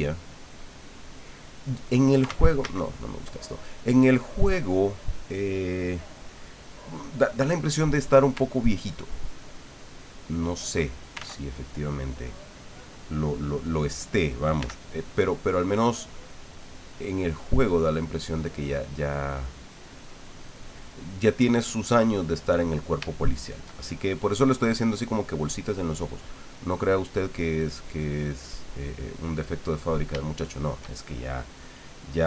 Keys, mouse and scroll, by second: 2.3 ctrl+z, 8.9-10.6 ctrl+drag, 11.2 ctrl+z, 14.6 f, 15.4 click, 16.0-18.2 drag, 18.8-20.5 drag, 22.1 middle click, 23.1 shift+middle click, 23.7 shift+middle click, 26.6 click, 27.1 click, 27.8 click, 28.5 click, 29.6 middle click, 30.3 shift+middle click.